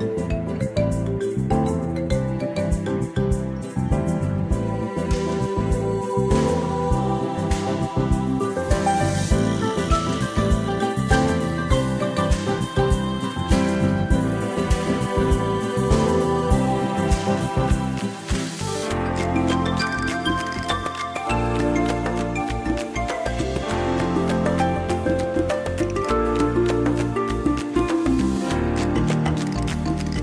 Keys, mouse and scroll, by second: 4.6 Down, 11.5 click, 12.1 space, 13.9 ctrl+scroll up 2, 16.7 ctrl+scroll down 1, 18.7 ctrl+scroll up 1, 19.6 space, 21.3 click, 24.6 space, 25.2 scroll down 1, 26.5 click, 28.0 space, 29.4 click, 30.0 space.